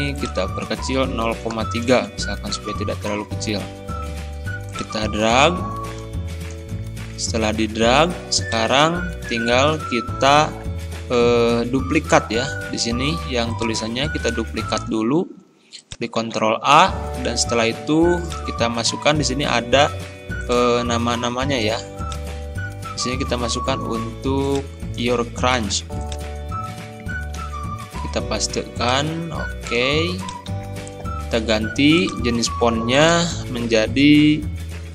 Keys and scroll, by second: 16.3 ctrl+a, 25.6 ctrl+c, 27.4 ctrl+v, 30.5 ctrl+a, 34.1 b.